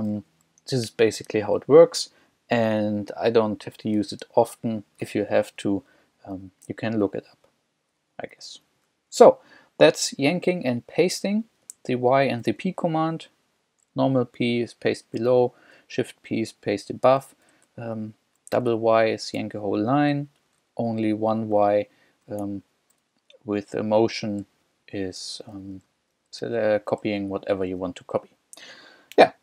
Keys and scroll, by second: 0.2 j, 5.4 j, 6.4 w, 8.6 j, 10.6 k, 11.6 j, 18.6 y, 20.5 j, 21.6 y, 22.5 Escape, 24.5 l.